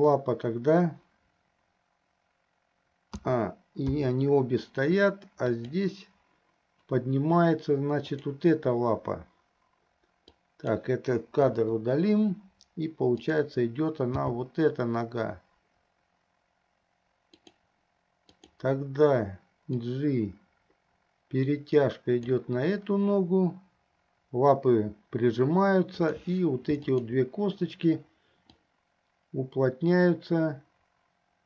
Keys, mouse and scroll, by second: 3.3 a, 4.2 i, 5.6 click, 8.1 click, 10.5 click, 11.6 Delete, 14.3 g, 18.6-18.9 drag, 20.1-22.6 drag, 26.1 click, 27.1 shift+click, 28.8-31.4 drag.